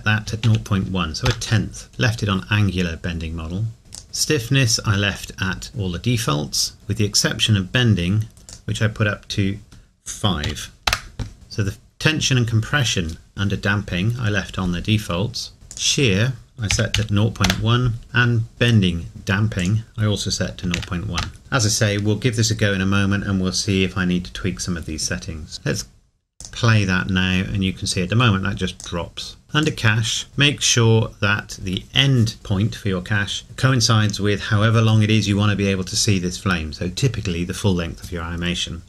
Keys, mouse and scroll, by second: 0.3 KP_Decimal, 1.9 KP_Enter, 3.9 click, 8.5 click, 10.5 KP_5, 15.7 click, 16.7 KP_Decimal, 18.1 KP_Enter, 19.6 click, 20.6 KP_Decimal, 21.7 KP_Enter, 26.4 click, 29.4 scroll down 1, 29.6 click.